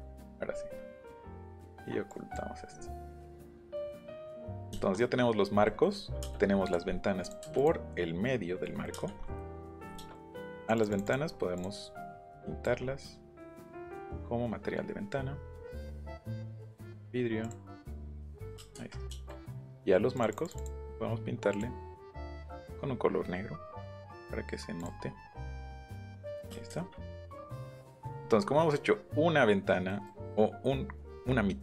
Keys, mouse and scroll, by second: 0.9 middle click, 1.3 middle click, 2.1 click, 2.5 middle click, 2.8 middle click, 3.7 shift+middle click, 4.8 shift+middle click, 5.6 middle click, 6.2 space, 6.6 click, 7.2 click, 7.6 click, 8.9 space, 9.6 Escape, 10.6 click, 10.7 click, 10.9 click, 11.3-12.2 scroll down 2, 11.5 click, 12.2 click, 12.8 scroll up 1, 14.1 click, 15.7 click, 16.1 scroll up 1, 16.7 click, 17.4 click, 18.1 click, 18.7 Escape, 20.2 click, 20.4 click, 21.5 click, 22.3 click, 23.1 middle click, 24.8 click, 25.8 click, 26.4 middle click, 26.6 space, 27.6 Escape, 27.7 middle click, 28.2 middle click, 29.9 middle click.